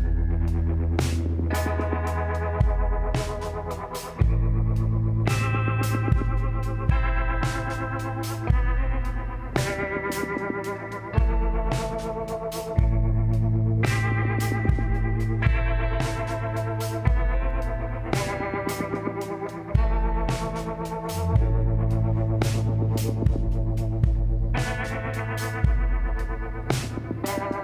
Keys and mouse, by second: 2.9 shift+a, 7.5-8.7 middle drag, 7.9 z, 9.7 t, 10.6-12.0 middle drag, 12.2-13.9 drag, 16.1-19.3 drag, 19.3 s, 21.4 z, 21.7-24.5 middle drag, 23.5 s, 26.6 r.